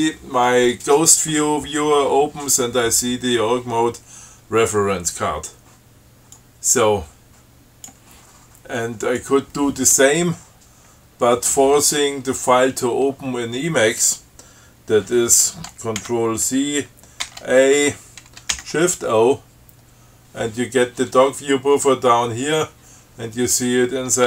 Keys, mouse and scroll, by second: 6.6-8.3 drag, 9.3 click, 16.3 ctrl+c, 17.5 ctrl+a, 18.8 shift+o, 23.6 click.